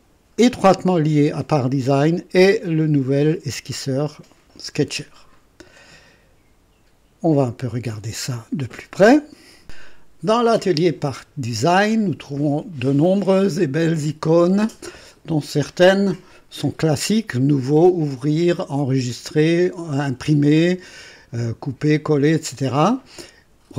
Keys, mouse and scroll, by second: 7.6 click, 9.6 click.